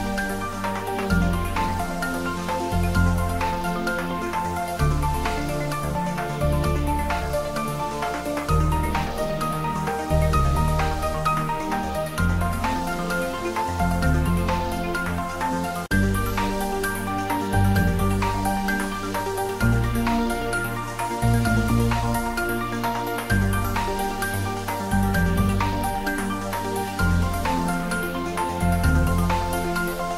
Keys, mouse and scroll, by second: 0.4 r, 1.7 click, 3.4 click, 5.0-9.2 typing, 5.1 click, 8.1 click, 9.4 click, 9.6 ctrl+s, 9.9-11.4 shift+middle drag, 11.4 click, 12.8 s, 13.7 click, 14.0-14.9 typing, 15.0 click, 15.2 ctrl+s, 18.2 click, 18.6 ctrl+s, 18.9 shift+middle click, 19.4 ctrl+middle click, 20.1-21.5 middle drag, 21.5 ctrl+s, 21.7 shift+middle click, 22.6 ctrl+middle click, 23.2 shift+middle click, 23.7 ctrl+s, 23.8-26.3 ctrl+middle drag.